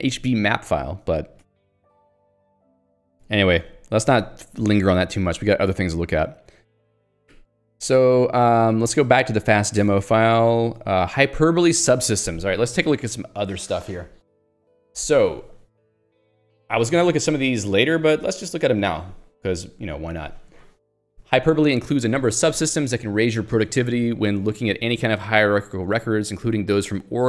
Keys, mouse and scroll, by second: 1.5 q, 1.8 Escape, 4.1 j, 5.6 super+e, 6.3 q, 7.3 ctrl+alt+j, 7.9 ctrl+g, 8.3 scroll up 1, 8.8 ctrl+alt+j, 9.8 Return, 10.0 Escape, 10.7 ctrl+d.